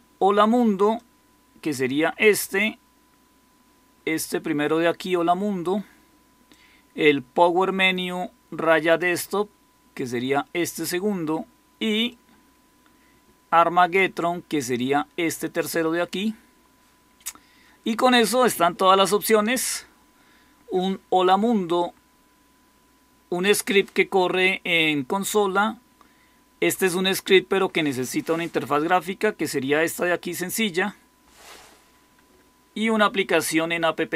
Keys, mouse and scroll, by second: 32.1 Escape.